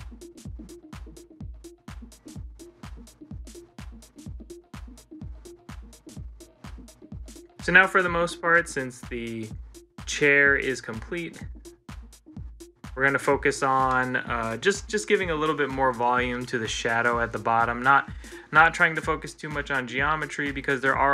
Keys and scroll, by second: 1.5 ctrl+z, 2.2 ctrl+z, 8.1 ctrl+s, 12.3 ctrl+z, 12.7 ctrl+z, 13.4 ctrl+z, 16.1 ctrl+z, 17.6 ctrl+z.